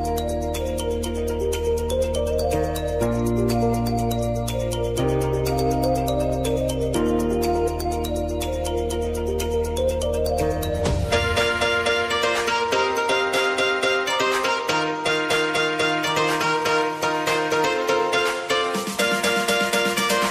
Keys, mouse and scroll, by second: 6.0 ctrl+t, 6.5 click, 7.1 ctrl+a, 7.8 ctrl+c, 8.7 Right, 10.0 Tab, 10.9 ctrl+v, 12.3 Tab, 13.1 ctrl+v, 14.0 Tab, 14.7 ctrl+v, 15.2 Tab, 16.0 ctrl+v, 16.5 Tab, 17.2 ctrl+v, 17.6 Tab, 18.3 ctrl+v, 19.0 Tab.